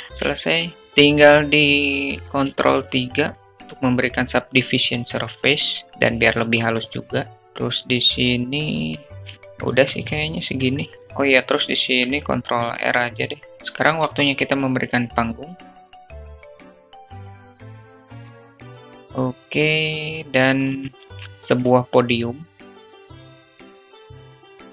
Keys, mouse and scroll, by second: 0.5 click, 2.6 ctrl+3, 4.2-5.4 alt+drag, 5.5 alt+shift+drag, 7.3 Tab, 9.1 alt+shift+Tab, 9.1 alt+shift+click, 10.9 Tab, 11.4 ctrl+r, 13.6 shift+a, 15.5-18.0 typing, 16.0 click, 16.2 Tab, 16.7 ctrl+b, 17.1 Tab, 18.0 shift+click, 20.4 shift+a, 22.9 click, 23.4 shift+a, 23.4 shift+click, 24.2 shift+a, 24.3 shift+click, 24.5 Tab.